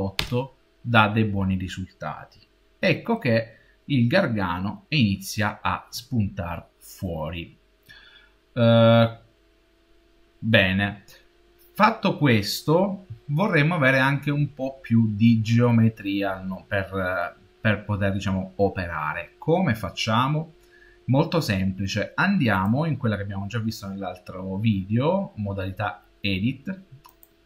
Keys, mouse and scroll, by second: 3.4-5.9 middle drag, 22.4 click.